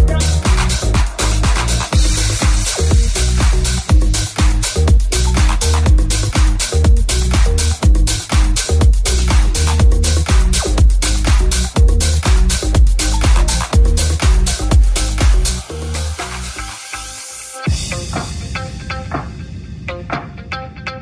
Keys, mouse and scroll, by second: 1.1 g, 1.1 3, 1.2 right click, 1.2 shift+middle click, 1.4 right click, 1.5 middle click, 1.7 right click, 1.8-18.4 middle drag, 4.0 e, 13.6 ctrl+Tab, 16.3 f, 18.4-21.0 ctrl+drag, 18.7 ctrl+z, 19.8 shift+f.